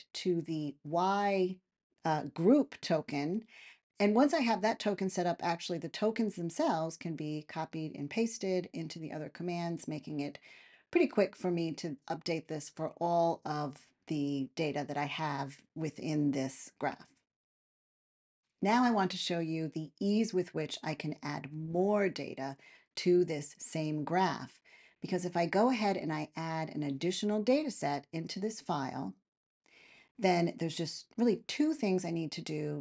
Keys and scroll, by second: 4.3 Return, 14.0 super+v, 15.4 Return.